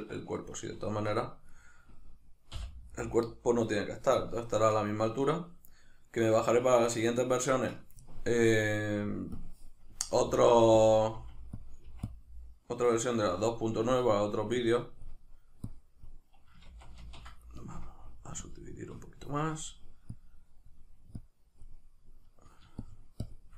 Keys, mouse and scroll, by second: 0.9 Tab, 1.5 right click, 2.5 h, 2.9 right click, 3.7-9.4 middle drag, 6.6 Tab, 9.4-10.9 drag, 10.2 f, 11.2 f, 11.7 click, 11.9 f, 12.2 click, 13.3-14.7 ctrl+middle drag, 14.7 click, 15.2 middle click, 15.7-22.5 drag, 16.7 ctrl+z, 22.5 middle click, 22.9 shift+click.